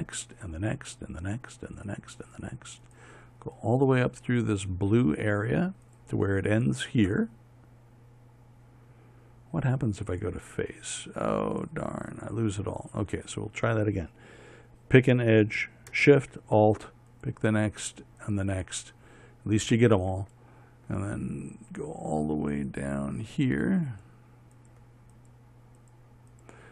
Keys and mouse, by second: 13.9-17.7 right drag.